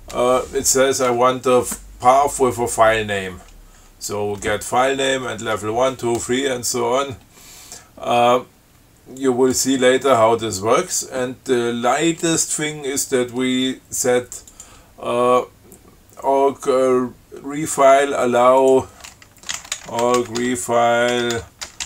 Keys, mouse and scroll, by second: 9.5 click, 14.7 click, 18.8 click, 19.5-21.8 typing, 21.6 Tab.